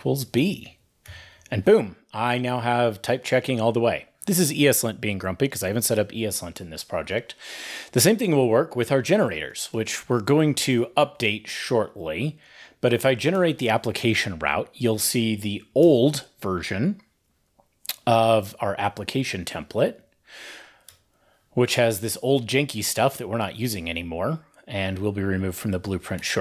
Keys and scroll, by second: 0.4 super+s, 0.8 ctrl+n, 0.8 ctrl+e, 1.0 ctrl+n, 8.1 ctrl+`, 12.5 ctrl+e, 17.8 ctrl+`, 19.1 super+p.